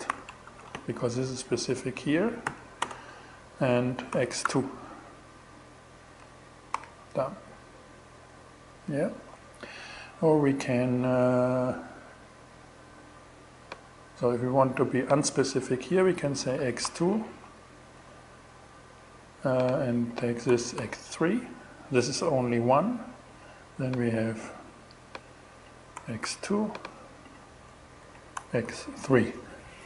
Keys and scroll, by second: 0.0-0.4 typing, 3.5 x, 3.9 2, 6.2 alt+6, 15.5-16.6 typing, 19.9 BackSpace, 20.2 3, 25.4 x, 25.7 2, 27.4 Left, 27.8 BackSpace, 28.1 3.